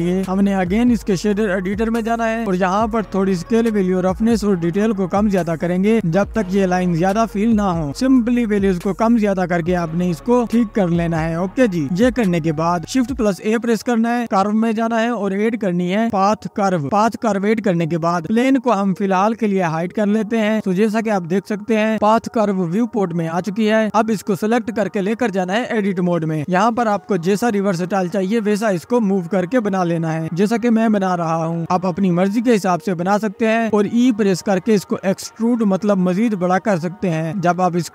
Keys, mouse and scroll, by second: 1.2 click, 3.6 space, 4.3 click, 5.0-5.8 scroll down 6, 5.8-6.1 scroll up 2, 6.1 click, 6.4 scroll up 2, 6.5-6.9 scroll down 1, 6.9 click, 7.6-8.2 scroll down 4, 8.2 middle click, 8.6 scroll down 1, 8.8 middle click, 9.1-9.5 scroll up 8, 9.9-11.1 drag, 13.2 shift+a, 15.8 s, 18.0 click, 19.1 click, 20.0 Tab, 20.7 click, 21.3 Tab, 22.9 Tab, 23.8 Tab, 24.8 click, 26.6-28.0 drag, 28.8 click, 29.2 middle click, 29.2 scroll down 1, 29.5 click, 29.8 click, 31.0 middle click, 31.0-31.3 scroll down 1, 31.3 click, 31.5 middle click, 31.9 click, 32.6 e, 33.5 x, 33.8 click, 34.3 middle click, 34.8-35.8 drag, 37.2 click.